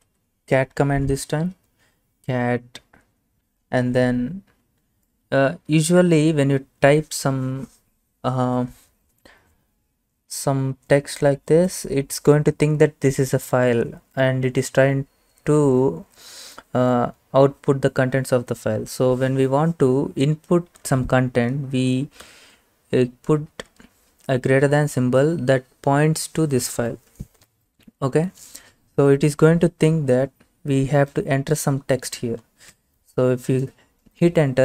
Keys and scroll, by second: 0.0-1.7 typing, 5.7 typing, 20.9 Left, 22.3 typing, 23.5 space, 28.3 Right, 28.3 Right, 28.4 Right, 32.8 Return.